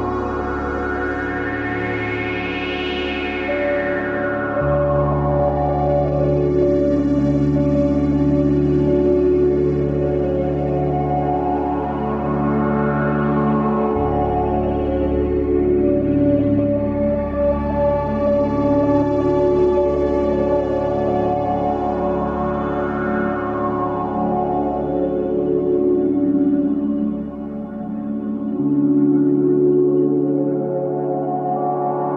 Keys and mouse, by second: 2.5 click, 4.6 shift+d, 8.1-8.6 shift+middle drag, 9.3 shift+d, 16.4 ctrl+s, 17.2-18.0 middle drag, 18.4 ctrl+s, 22.8-23.4 shift+middle drag, 25.3 Tab, 26.8 ctrl+s, 27.6 Tab, 29.3-32.1 middle drag.